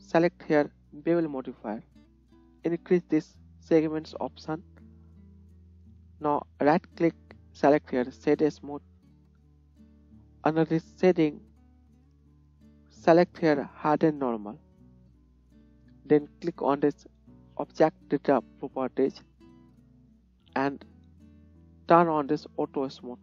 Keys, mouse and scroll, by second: 6.7-14.6 middle drag, 6.7-19.3 right drag, 19.1-23.0 drag, 19.1 middle click, 23.0 middle click, 23.1-23.2 right drag.